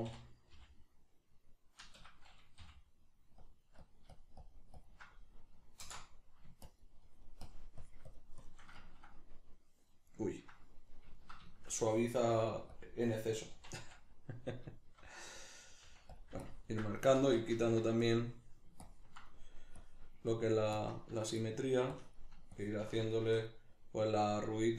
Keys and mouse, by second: 0.1 f, 2.8 middle click, 3.4-6.1 drag, 5.8 alt+m, 6.1 middle click, 6.7-8.9 shift+drag, 8.9-12.8 ctrl+middle drag, 12.3 f, 12.8 click, 13.6 shift+c, 13.8 f, 14.6 click, 14.8-16.2 shift+middle drag, 15.9 f, 16.4-21.4 ctrl+drag, 17.2 ctrl+z, 21.4 middle click, 22.0-23.0 ctrl+drag, 23.0-24.7 shift+middle drag.